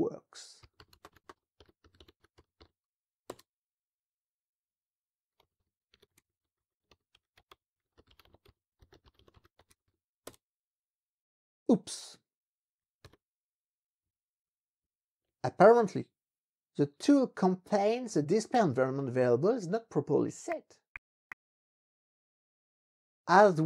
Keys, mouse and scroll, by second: 0.4-3.1 typing, 3.3 Return, 5.2-10.3 typing, 13.0 alt+5, 14.0 Page_Up, 14.8 Page_Up.